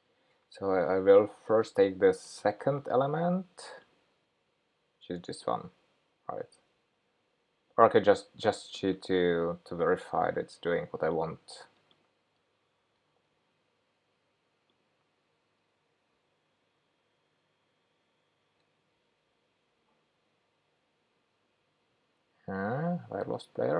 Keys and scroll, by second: 17.6 shift+super+p.